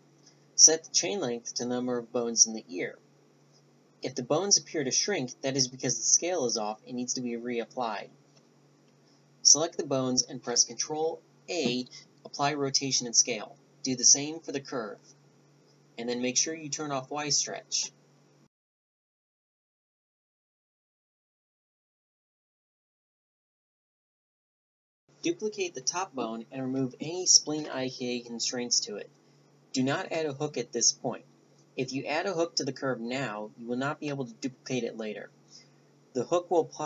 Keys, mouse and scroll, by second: 2.3 ctrl+a, 5.2 Tab, 5.5 Tab, 5.9 click, 7.4 ctrl+a, 10.0 right click, 10.5 Tab, 12.1-12.7 drag, 13.1-15.9 drag, 19.2-23.9 drag, 22.2-26.2 right drag, 27.7 click, 29.0 Delete, 30.1 Tab, 30.5 a, 30.7 b, 31.9-33.9 right drag, 32.5 b, 33.6 b, 34.5 middle click, 35.2 b.